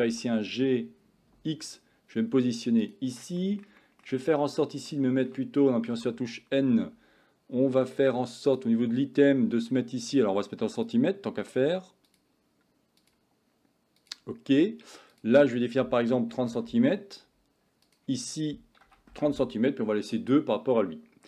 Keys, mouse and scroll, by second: 0.1 g, 4.9-5.4 shift+middle drag, 6.0 n, 8.5 click, 12.1 click, 13.1-14.1 drag, 15.3-16.6 drag, 17.9-19.2 drag, 20.6 middle click.